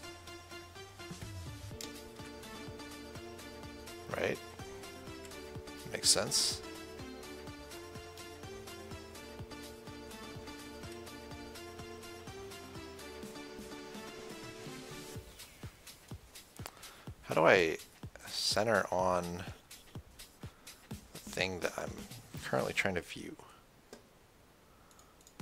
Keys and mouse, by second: 0.8 KP_1, 1.2 KP_3, 2.4 KP_1, 5.5 KP_1, 11.1 KP_1, 12.7 KP_0, 13.6 KP_1, 16.1 f, 17.7 c, 18.5-21.0 right drag, 25.2 click.